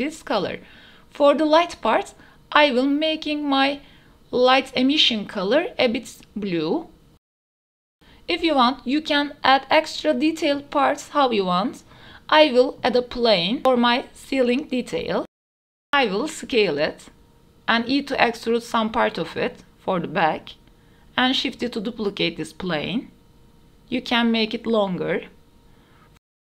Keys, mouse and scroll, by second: 2.1 click, 6.1 click, 7.1 r, 7.4 x, 7.5 d, 7.5 w, 8.0 Tab, 8.9 shift+s, 9.5 Tab, 10.1 shift+a, 12.2-14.3 typing, 13.1 KP_Enter, 13.9 KP_Enter, 15.5-19.3 typing, 16.7 click, 18.1 drag, 18.8 shift+click, 19.6 shift+middle click, 19.7 click, 19.8 middle click, 19.8 click, 19.9 Tab, 20.5 2, 20.5 KP_1, 21.3 e, 21.5 x, 22.1 Tab, 22.3 middle click, 22.7 shift+middle click, 23.5 shift+d, 23.7 z, 24.3 click, 24.5 middle click, 24.9 Tab, 25.6 click, 25.7 middle click, 25.9 g, 26.1 y.